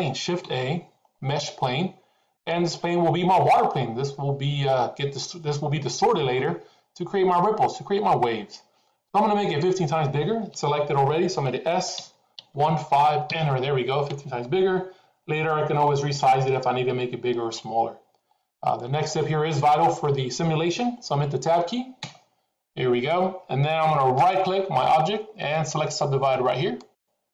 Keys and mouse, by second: 0.3 shift+a, 11.9 s, 18.7 middle click, 22.0 Tab, 24.2-26.9 right drag.